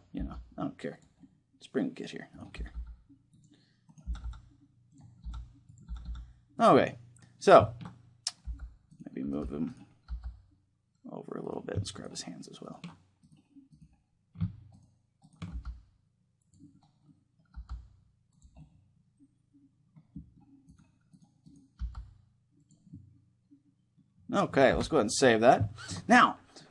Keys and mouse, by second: 0.0 g, 2.2 r, 2.8 right click, 3.8 r, 5.0 r, 5.4 right click, 5.6-8.2 drag, 5.6 r, 6.6-9.3 middle drag, 8.2 g, 9.0 g, 9.3-11.2 right drag, 9.8 g, 11.2-16.8 right drag, 15.2 g, 16.2-19.9 drag, 16.8-20.4 middle drag, 17.3 g, 20.4-21.8 drag, 21.6 g, 21.8 right click, 22.6-24.2 drag, 22.6 right click, 24.2 middle click, 24.4 ctrl+s, 25.4-26.7 middle drag.